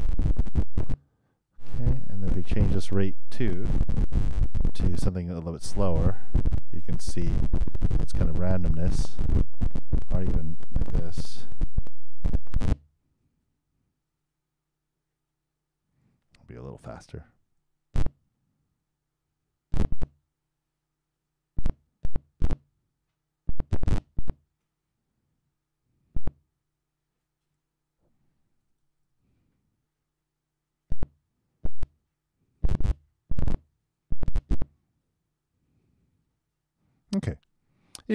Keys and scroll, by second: 8.1 super+i, 11.9 super+0, 12.3 super+Return, 17.3 super+i, 17.6 super+Return, 28.8 super+3, 29.0 super+Return, 37.8 super+..